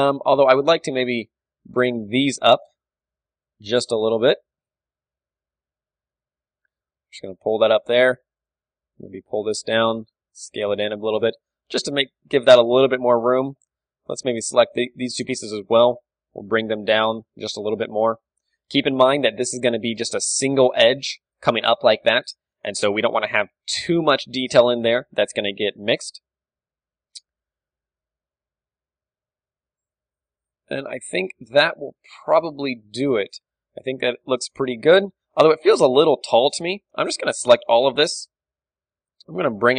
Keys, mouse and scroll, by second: 0.0-3.6 middle drag, 0.8 Tab, 2.3-5.0 right drag, 3.6 ctrl+KP_Add, 5.0 ctrl+KP_Add, 5.4 z, 5.8 b, 6.4 z, 6.8 g, 8.1-9.8 drag, 8.1 a, 8.5-9.6 right drag, 9.2 g, 9.8-10.9 right drag, 10.9-15.7 drag, 10.9 s, 11.1 Tab, 13.6 Tab, 13.9-16.8 typing, 16.8-18.6 drag, 17.4 Tab, 18.0 a, 18.6-20.2 middle drag, 19.7 d, 20.1-22.2 drag, 22.2 d, 22.3-23.5 right drag, 22.8 d, 23.2-28.9 middle drag, 24.1 Tab, 24.6 Tab, 26.4 a, 26.8 a, 30.1 Tab, 31.0 Tab, 32.6 a, 34.0 KP_1, 34.3 a, 36.1 Tab, 36.5 z, 36.8 a, 36.9 b, 38.5 g.